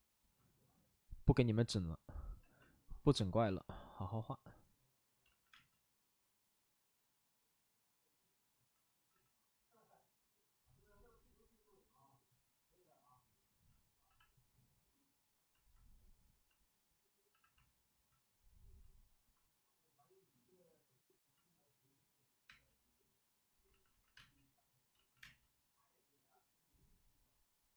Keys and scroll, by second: 2.2 c, 3.3 space, 5.4 ctrl+z, 5.4 space, 8.6 c, 9.0 c, 14.0 c, 17.2 c, 22.4 space, 23.6 ctrl+z, 23.8 ctrl+z, 24.1 space, 24.9 ctrl+z, 25.1 space.